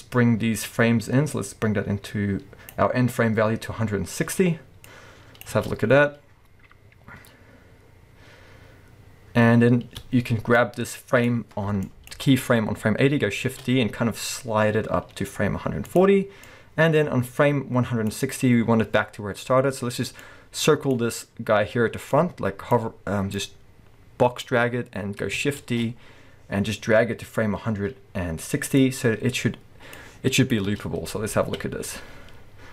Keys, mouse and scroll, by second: 5.5 space, 10.0 space, 11.9-13.1 drag, 13.4 shift+d, 16.4-20.3 drag, 22.1-22.7 drag, 23.4-23.7 drag, 25.6 shift+d, 28.8 click, 30.0-32.7 drag, 30.7 space, 31.4 alt+a.